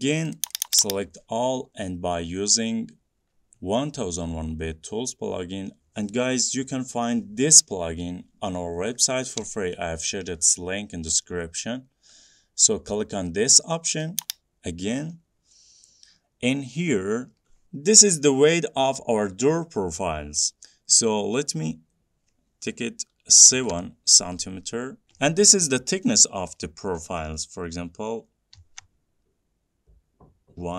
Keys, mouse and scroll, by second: 0.5 click, 0.7 click, 0.9 click, 14.4-17.7 drag, 23.7 7, 28.8 1, 30.6-30.7 typing.